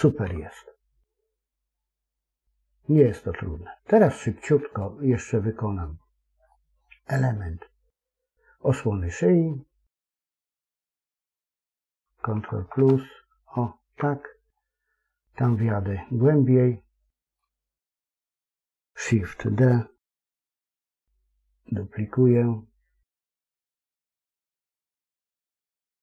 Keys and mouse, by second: 0.1 KP_1, 2.9-4.0 middle drag, 5.0 middle click, 6.4 middle click, 12.2 ctrl+KP_Add, 12.5 ctrl+KP_Add, 12.7 ctrl+KP_Add, 14.4 ctrl+middle click, 15.3-17.3 middle drag, 17.5 shift+middle click, 20.2 shift+d.